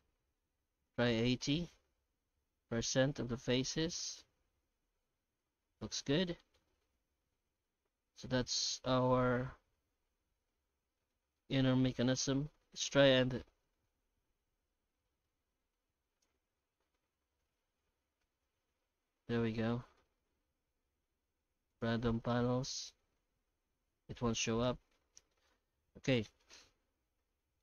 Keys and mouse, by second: 3.3-6.5 middle drag, 7.6-11.1 middle drag, 11.3-12.2 shift+middle drag, 12.2 F9, 16.8-19.9 middle drag, 20.7 shift+q, 24.2 ctrl+z, 24.9 shift+middle click, 25.6 middle click, 26.4 right click, 26.7 Tab, 27.1 alt+shift+z, 27.4 shift+middle click.